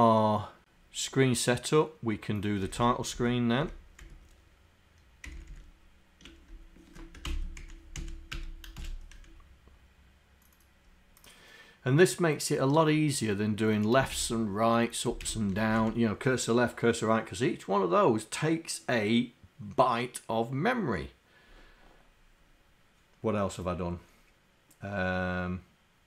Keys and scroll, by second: 7.3 ctrl+Insert, 8.0 Up, 8.4 Return, 8.8 shift+Insert, 14.1 shift+Insert, 15.7 Down, 15.8 Up.